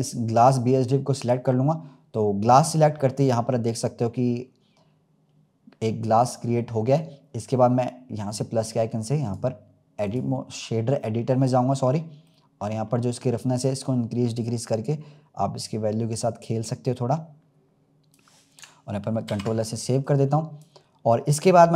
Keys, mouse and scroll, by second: 3.2-4.0 scroll up 2, 6.9-11.8 drag, 11.8-12.2 scroll up 2, 12.2 middle click, 12.9-13.6 scroll up 2, 13.6-17.8 drag, 20.0 click, 20.9-21.7 scroll down 2.